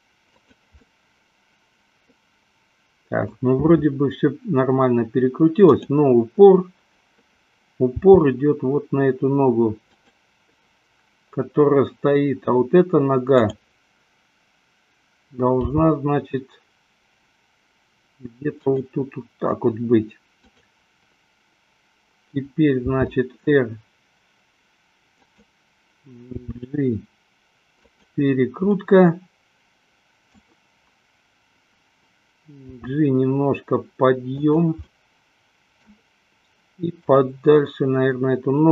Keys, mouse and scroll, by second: 0.7 click, 1.3-3.6 middle drag, 8.1 g, 10.5 click, 13.3 click, 15.8 g, 20.5 click, 22.7 r, 25.6 click, 26.7 g, 28.2 click, 29.0-30.8 middle drag, 33.0 g, 34.7 click, 35.2 middle click.